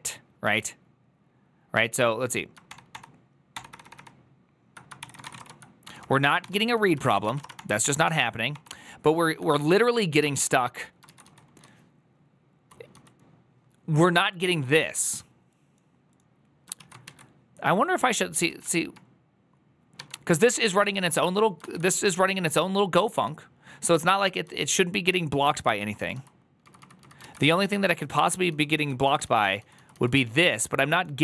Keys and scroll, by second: 2.8 ctrl+d, 3.4 ctrl+d, 3.6 ctrl+d, 4.1 ctrl+d, 4.9-7.6 typing, 7.7 ctrl+d, 8.4 ctrl+d, 9.4-9.7 typing, 10.1 ctrl+d, 11.0 ctrl+u, 11.1-12.4 typing, 14.4-15.1 typing, 18.3 ctrl+a, 18.3 2, 19.9 1, 20.2 ctrl+u, 20.7 ctrl+u, 23.1 ctrl+u, 23.1-24.1 typing, 26.3-28.4 typing, 29.4 j.